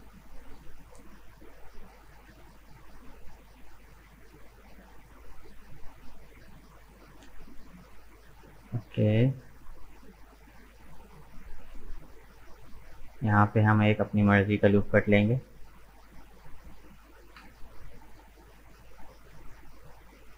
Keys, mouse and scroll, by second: 0.4-0.9 scroll down 1, 0.9-2.2 middle drag, 2.2 click, 2.5-6.1 middle drag, 6.1 right click, 6.6-9.7 middle drag, 13.4 k, 18.3 right click, 18.9-20.3 middle drag.